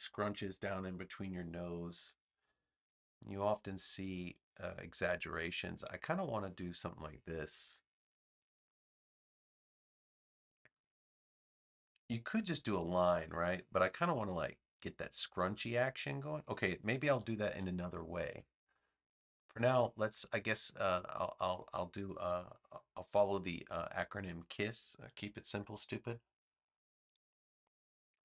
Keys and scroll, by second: 10.7 v, 16.9 super+z.